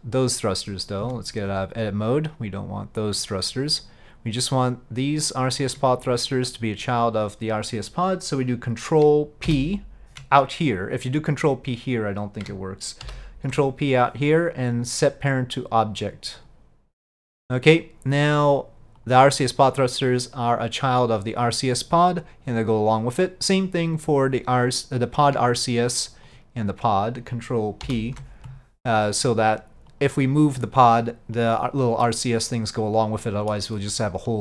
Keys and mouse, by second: 1.1 Tab, 5.4 click, 9.5 ctrl+p, 13.1 ctrl+p, 17.2 middle drag, 18.5 click, 19.1-25.4 drag, 26.4-27.9 ctrl+drag, 27.9 ctrl+p, 30.0 click, 33.3 middle click.